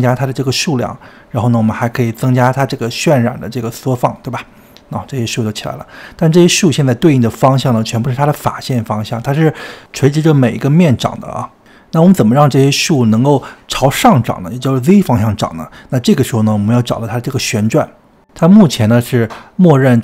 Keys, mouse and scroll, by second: 0.1-6.9 drag, 6.9-11.4 middle drag, 11.4 click, 12.9 Tab, 13.7 Tab, 14.3-14.8 scroll down 2, 14.8-19.0 middle drag, 19.0-20.0 drag.